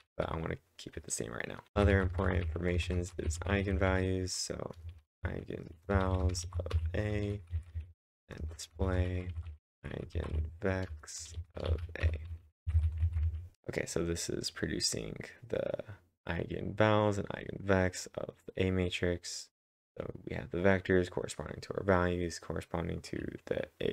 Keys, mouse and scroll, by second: 0.0-4.4 typing, 5.7 Return, 5.8-9.4 typing, 10.9 Return, 11.3-13.3 typing.